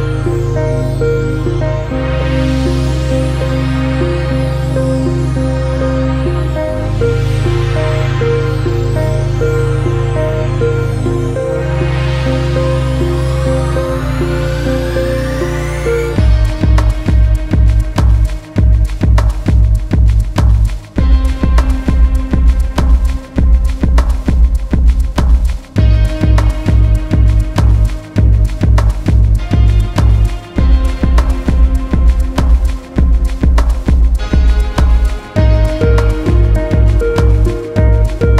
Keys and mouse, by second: 13.1 click, 14.5 click, 17.2 click, 20.2 click, 28.0 click, 33.1 click, 36.6 click, 36.6 typing.